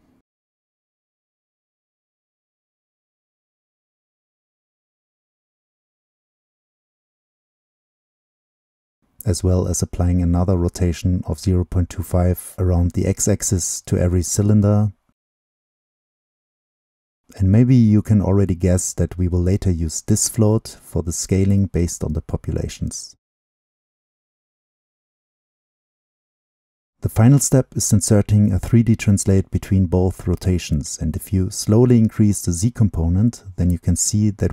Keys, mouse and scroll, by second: 1.9-2.9 drag, 2.9-3.5 middle drag, 3.5-6.8 drag, 5.7-6.1 scroll up 2, 6.8-7.1 middle drag, 7.1-8.8 drag, 10.1-11.8 drag, 12.2-13.7 drag, 13.7-14.7 middle drag, 14.7-17.1 right drag, 17.1-18.7 drag, 18.7 right click, 24.6-25.1 drag, 25.9-29.0 drag, 30.9-33.3 drag, 33.7-34.5 drag.